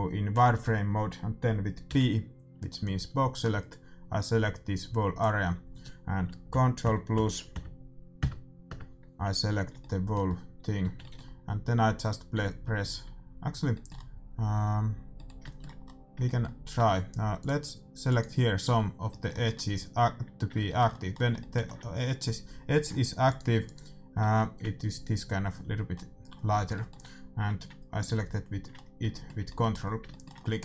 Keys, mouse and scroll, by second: 1.8 b, 6.5 ctrl+KP_Add, 9.7 middle click, 10.8 z, 14.1-15.3 middle drag, 17.4-20.0 right drag, 20.0-25.9 middle drag, 23.3-25.9 right drag, 26.5-30.3 middle drag.